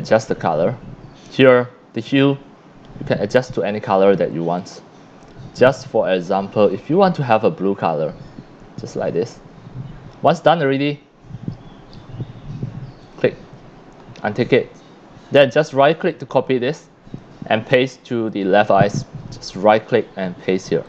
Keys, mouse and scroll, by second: 2.2-3.6 drag, 4.6-5.2 drag, 6.7-7.9 drag, 9.1 scroll down 1, 10.1 click, 13.0 click, 15.3 right click, 16.4 click, 18.3 click, 19.5 right click.